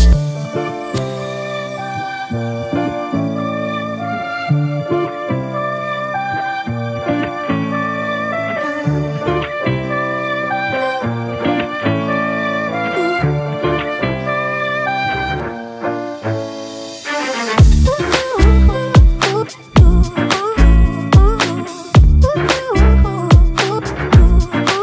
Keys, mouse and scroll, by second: 8.2 ctrl+t, 9.0 alt+shift+click, 10.7 alt+shift+click, 12.4 alt+shift+click, 14.7 alt+shift+click, 16.0 alt+shift+click, 16.8 alt+shift+click, 18.9 Return, 19.3 ctrl+-, 19.7 ctrl+t, 20.4 alt+shift+click.